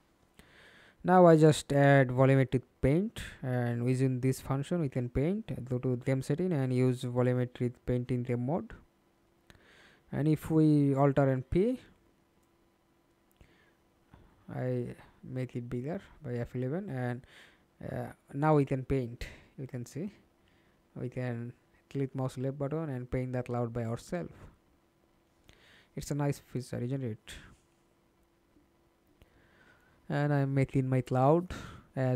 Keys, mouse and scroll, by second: 0.5 scroll down 1, 3.5 scroll up 2, 3.6 scroll down 1, 11.1 F11, 12.3 middle click, 13.0 F11, 13.8 alt+p, 15.0-17.1 scroll down 1, 17.1 scroll down 1, 31.3 right click.